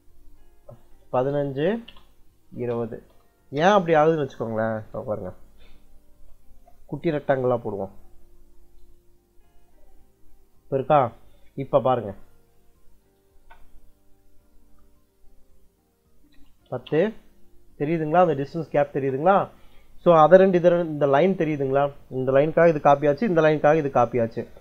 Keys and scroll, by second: 1.0 1, 1.5 ', 1.7 Return, 2.4 2, 2.9 ', 3.5 Return, 5.7 r, 6.0 e, 6.9 space, 12.7 c, 13.2 space, 15.8-17.0 typing, 18.7 space, 24.3 Escape.